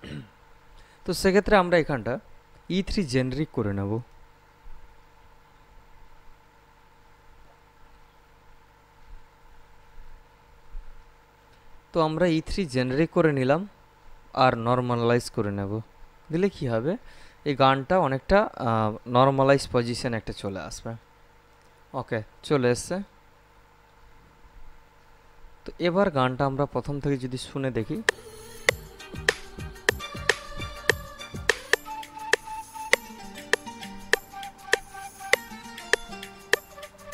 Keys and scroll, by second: 28.0 space.